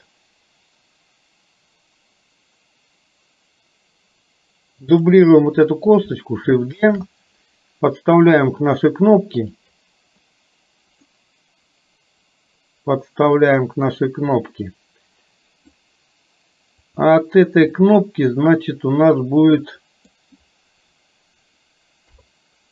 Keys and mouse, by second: 5.1 click, 6.9 shift+d, 11.1-15.9 middle drag, 17.0 click, 17.8-20.1 middle drag, 22.1 KP_3.